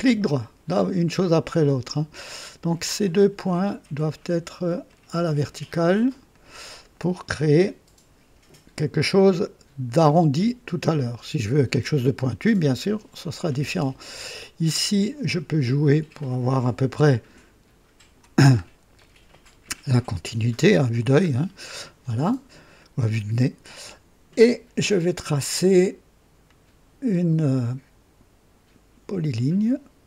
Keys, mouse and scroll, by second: 0.6 right click, 2.2 right click, 3.0 right click, 4.8 click, 6.2 click, 10.3 v, 15.5-18.1 drag, 18.4 scroll up 1, 18.9 right click, 21.2 scroll down 1, 26.4 click.